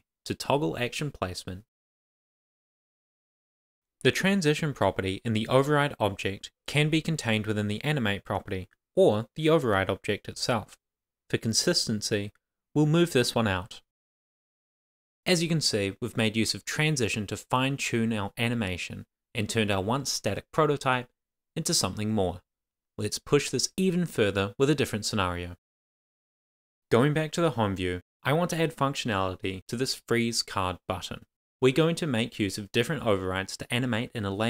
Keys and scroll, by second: 1.0 Tab, 1.9 shift+/, 2.0 shift+space, 2.3 shift+;, 3.2 super+s, 12.5 Down, 12.7 Up, 12.9 Right, 13.3 Left, 13.6 shift+Up, 14.2 alt+Down, 14.5 super+s.